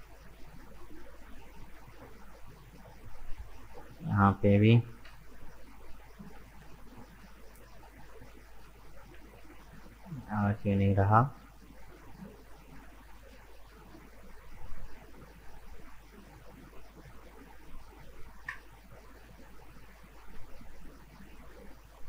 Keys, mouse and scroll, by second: 1.6 k, 6.0-6.5 scroll up 2, 6.5 shift+middle click, 7.3 scroll up 1, 8.2 ctrl+z, 8.5 ctrl+z, 9.0 ctrl+z, 9.8 right click, 10.3-13.3 middle drag, 13.3 k, 19.7 scroll down 2, 20.4-20.9 scroll up 2, 20.9-22.0 middle drag.